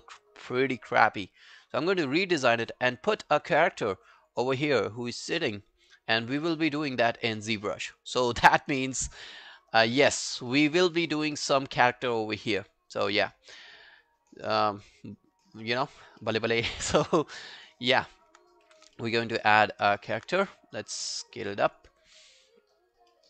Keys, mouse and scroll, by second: 3.9-4.2 scroll up 7, 7.0-7.7 scroll down 5, 10.5 scroll down 5, 10.5 middle click, 11.0-11.7 scroll up 10, 12.3 scroll down 4, 13.3 scroll down 1, 13.3-14.1 scroll up 9, 14.1 right click, 15.7 alt+middle click, 16.0-16.6 alt+scroll up 6, 16.2 alt+middle click, 16.8 alt+middle click, 17.0 alt+right click, 17.3 alt+click, 17.6 alt+middle click, 17.9 alt+scroll down 1, 18.1 alt+click, 18.7 r, 19.0 alt+middle click, 19.2 alt+right click, 19.5 alt+middle click, 19.8 alt+right click, 20.0 alt+click, 22.0 alt+scroll down 1, 22.2 alt+middle click, 22.6 alt+scroll up 1, 22.8 alt+click, 23.1 alt+middle click.